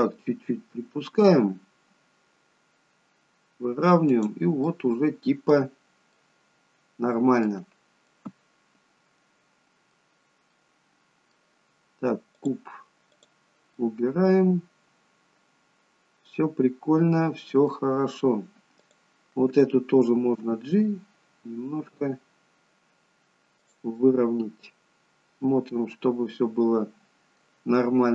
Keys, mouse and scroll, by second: 4.8 middle click, 5.8-6.2 scroll down 1, 6.3 middle click, 7.8-8.2 scroll down 1, 8.2 middle click, 10.6 middle click, 12.5 click, 13.3 click, 13.9 middle click, 18.9 click, 20.6 g, 24.1 middle click.